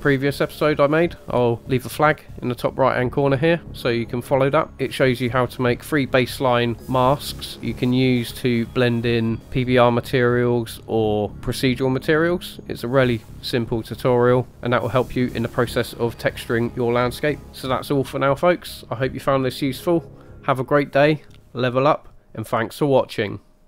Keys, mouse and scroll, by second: 8.9-9.6 scroll up 1.